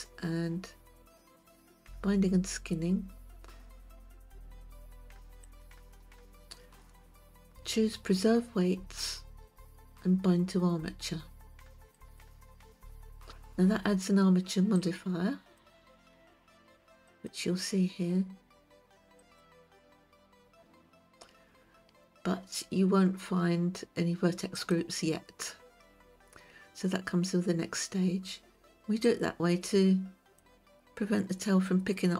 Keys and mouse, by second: 6.0 click, 12.5 click, 15.3 click, 17.6 click, 19.8 click, 25.1 click, 29.7-31.0 drag.